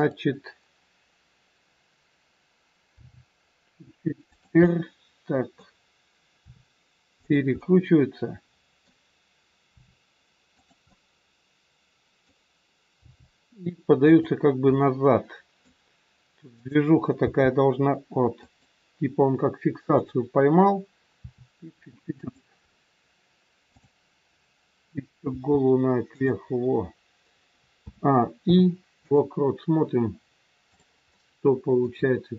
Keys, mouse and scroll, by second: 2.8 g, 4.6 middle click, 4.6 scroll up 1, 6.3 r, 7.5 middle click, 9.6 r, 10.7 middle click, 12.9 g, 14.6 scroll up 1, 14.8 middle click, 16.6 click, 17.4 g, 20.0 click, 21.2 r, 22.6 scroll down 2, 23.7 click, 25.2 r, 27.8 a, 28.3 i, 30.6 click, 31.1 middle click.